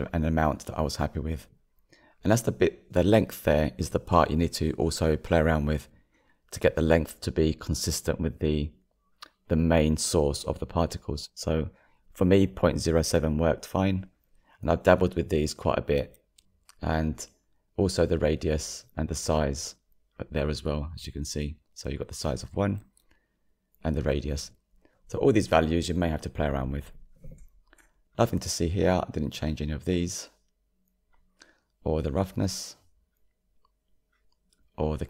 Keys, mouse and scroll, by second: 18.3-35.0 middle drag.